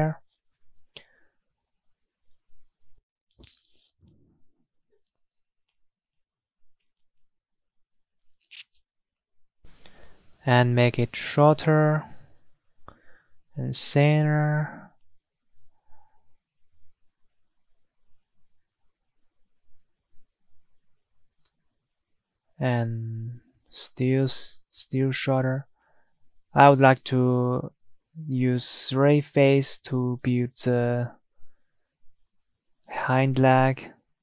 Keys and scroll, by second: 2.8 shift+Tab.